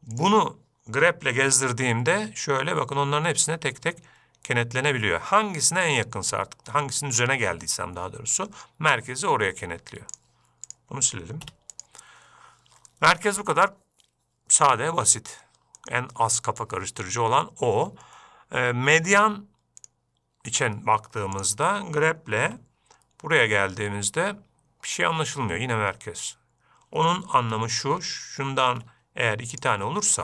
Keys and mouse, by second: 0.1 shift+middle click, 1.9 g, 10.6-13.3 drag, 13.3-13.8 middle drag, 16.3-20.6 drag, 21.8 click, 22.9 g, 29.1 shift+d.